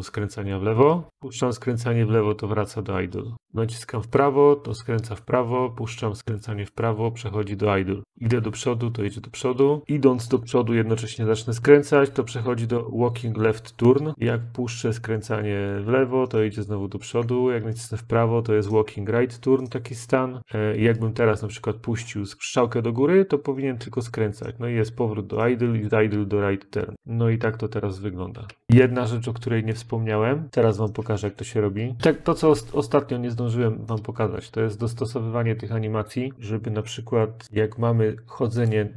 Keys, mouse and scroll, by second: 1.9 Left, 3.3-5.8 Right, 7.3 Right, 8.3-9.2 Up, 9.8 Up, 9.8 Right, 10.0 Up, 10.3 Up, 10.7-12.3 Up, 12.3-15.6 Left, 17.5 Left, 17.5-26.9 Right, 26.9 Up, 26.9-29.6 Left, 29.6 Up, 29.7 Up, 29.7 click, 31.8 click, 37.4 click, 38.6 click.